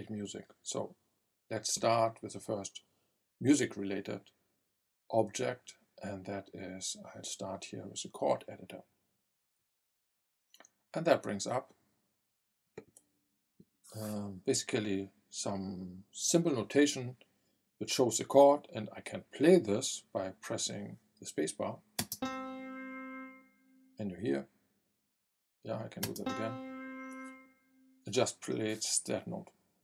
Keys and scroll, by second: 22.0 space, 26.0 space.